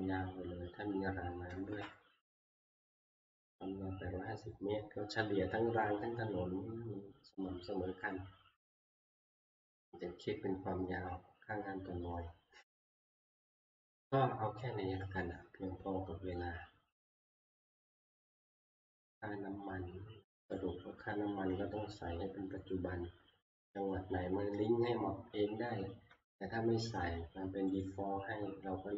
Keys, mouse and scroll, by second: 9.0-14.0 drag, 15.3-20.4 drag, 20.6-25.6 drag, 27.8-28.9 drag.